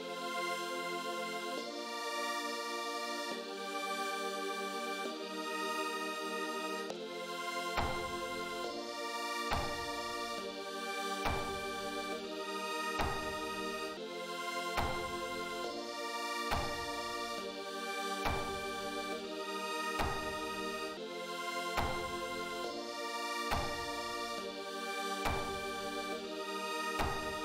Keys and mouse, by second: 3.7 click, 14.1 click.